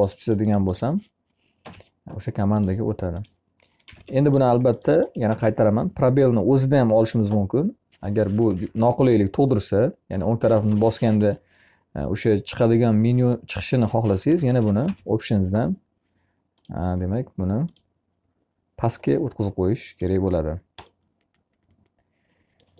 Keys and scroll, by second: 1.2 space, 3.7 e, 10.5 Escape, 14.2 o.